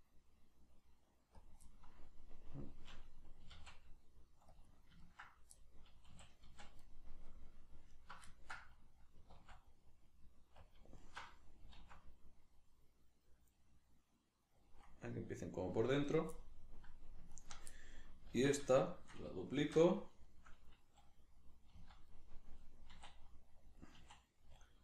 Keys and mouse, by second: 1.4 click, 1.6-4.6 middle drag, 3.4 s, 4.6 click, 4.7-7.9 middle drag, 6.1 a, 7.9 alt+right click, 8.3-11.0 ctrl+middle drag, 9.4 alt+s, 10.7 click, 11.0 alt+right click, 11.8 alt+s, 14.7 click, 15.2 middle click, 16.1 right click, 16.4-17.4 middle drag, 17.4 ctrl+right click, 17.8-20.0 middle drag, 18.3 alt+q, 19.6 shift+d, 20.0 right click, 20.2-23.8 shift+middle drag, 21.8 z, 23.8 click, 24.0 s, 24.7 click.